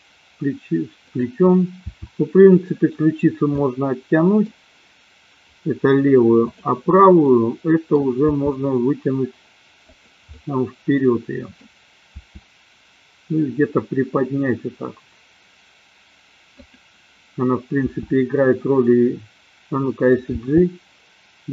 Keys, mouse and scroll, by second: 1.2 click, 2.0 r, 3.5-4.5 middle drag, 7.2 middle click, 8.3 r, 10.1 click, 10.3-11.6 middle drag, 12.0 r, 16.7 click, 18.0 r, 20.3 click, 20.5 g.